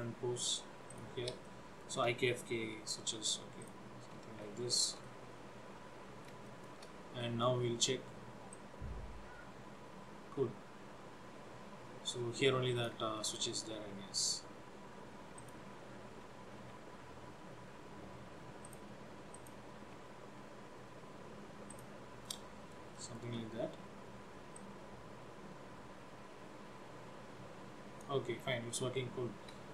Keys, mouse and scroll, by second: 1.6 shift+middle click, 2.8 r, 4.5 shift+middle click, 5.1 middle click, 6.6 shift+middle click, 7.3 middle click, 8.6 click, 13.2 shift+middle click, 15.5 click, 16.8 r, 19.4 click, 19.9 r, 22.3 middle click, 23.0 shift+middle click, 24.7 click, 28.5 scroll down 4.